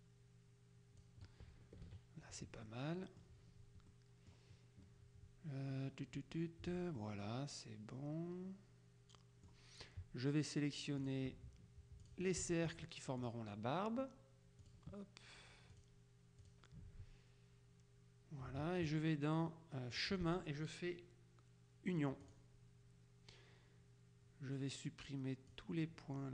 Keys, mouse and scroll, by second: 1.9 KP_Subtract, 2.7-3.8 middle drag, 3.9 middle click, 7.1-10.0 middle drag, 11.1 click, 12.1 click, 14.7 click, 15.9 click, 16.5 click, 20.1 click, 22.3 click, 25.6-26.3 drag.